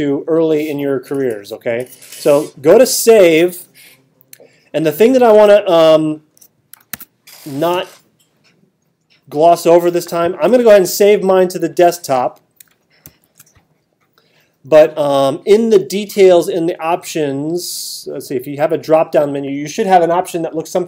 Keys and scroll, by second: 6.9 super+d, 13.0 alt+super+8.